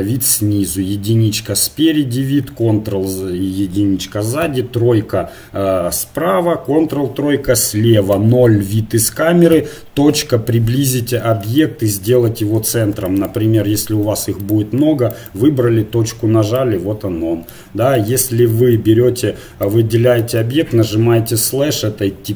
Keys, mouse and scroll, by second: 0.7 KP_1, 2.4 ctrl+KP_1, 4.5 KP_3, 6.4 ctrl+KP_3, 8.1 KP_0, 9.5 KP_Decimal, 12.6 shift+d, 13.9 shift+d, 15.9 KP_Decimal, 19.3 middle click, 19.4 KP_Decimal, 19.9 click, 20.9 KP_Divide.